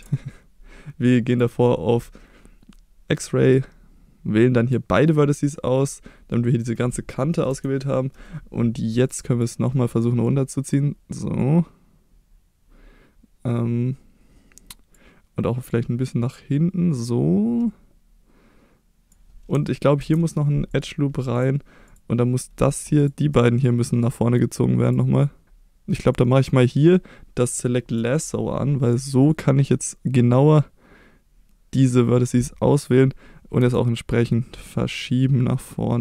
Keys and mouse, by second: 1.3 click, 3.4-4.7 drag, 5.1 middle click, 7.5 KP_3, 9.2 click, 10.2 click, 11.4-14.9 drag, 15.7-19.1 drag, 20.0 ctrl+r, 21.4 click, 23.0 shift+click, 24.8 click, 25.4 ctrl+z, 26.2-28.0 drag, 29.4-31.8 drag, 33.6 g.